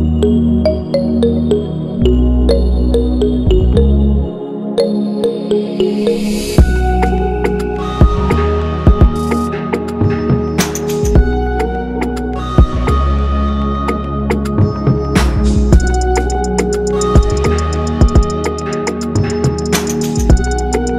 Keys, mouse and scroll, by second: 0.8 right click, 9.9 Right, 10.1 Right, 10.2 Right, 10.4 Right, 10.5 Right, 10.7 Left, 20.6 ctrl+-.